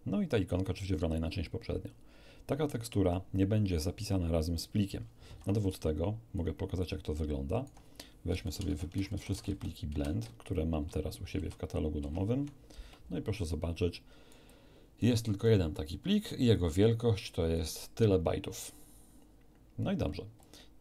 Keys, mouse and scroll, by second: 5.2 alt+F1, 5.7 alt+click, 6.8-7.8 alt+right drag, 8.3 alt+l, 8.5-9.5 typing, 9.9 Return, 11.4 =, 12.1 =, 13.5 alt+click, 14.2 alt+right click, 14.5 alt+click, 14.5 alt+middle click, 16.5-17.7 drag, 20.4 alt+click.